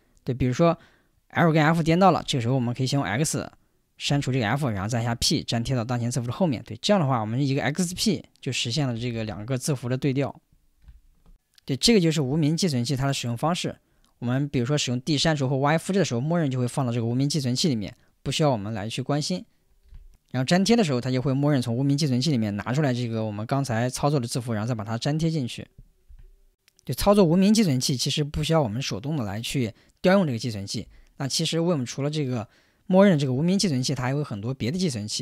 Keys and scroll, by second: 4.1 x, 5.0 p, 8.7-9.6 typing.